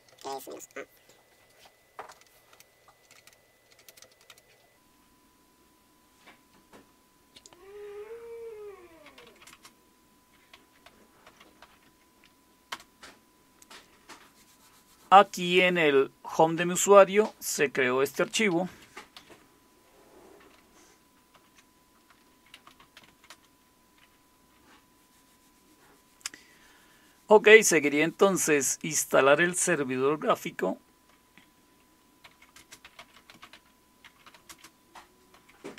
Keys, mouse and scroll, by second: 0.0-0.7 typing, 1.9-4.7 typing, 8.8-12.1 typing, 12.7 Return, 18.2 Down, 18.3 Down, 18.5 Down, 18.7 Down, 19.2 Down, 21.4 ctrl+x, 22.3-25.2 typing, 32.3-35.7 typing.